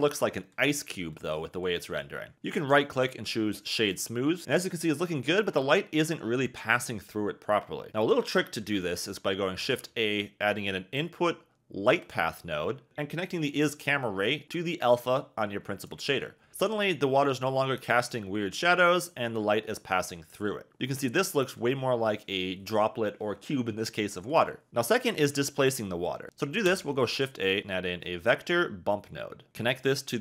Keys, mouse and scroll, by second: 2.8 click, 7.9 click, 8.4 click, 17.9 click, 18.9 click, 21.0 click, 26.6 shift+a, 29.9 click.